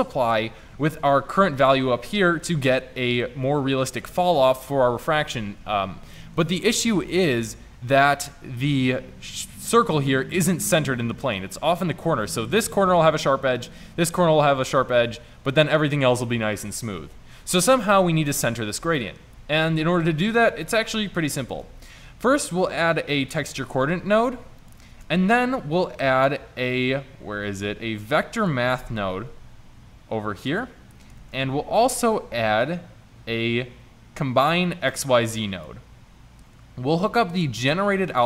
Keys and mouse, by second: 21.6 shift+a, 25.0 shift+a, 31.2 shift+a.